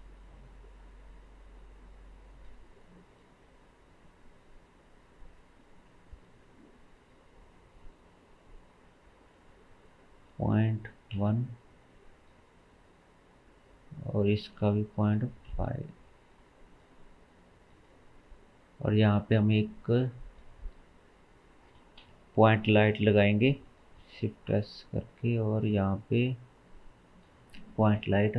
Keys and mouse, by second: 0.9-3.1 middle drag, 3.1 click, 3.3 middle drag, 5.0-5.9 drag, 6.6-12.9 drag, 12.9-14.1 middle drag, 14.1 click, 16.8-17.5 middle drag, 18.1-19.5 middle drag, 19.5-25.0 drag, 22.0 KP_7, 24.0 shift+s, 25.4 shift+a, 28.0 KP_1.